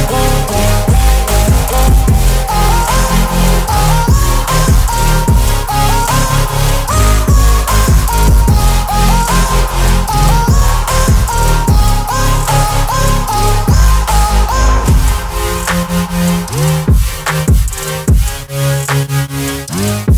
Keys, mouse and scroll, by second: 0.4-2.8 scroll up 1, 2.8 Return, 5.0 click, 8.8 shift+click, 10.1 ctrl+g, 11.6 click, 12.5-14.1 typing, 15.7 click, 17.7 shift+w, 18.4 ., 19.1 shift+f, 19.6 Return.